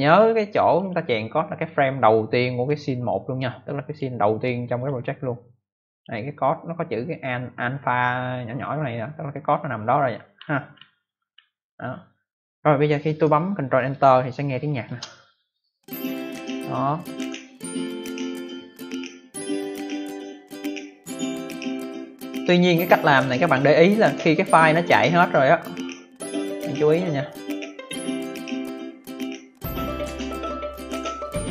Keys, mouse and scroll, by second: 0.0 click, 0.7 click, 3.8 click, 4.7 click, 5.8 click, 10.4-10.7 scroll up 2, 10.7-11.2 scroll down 1, 12.6 scroll down 1, 14.8 ctrl+Return.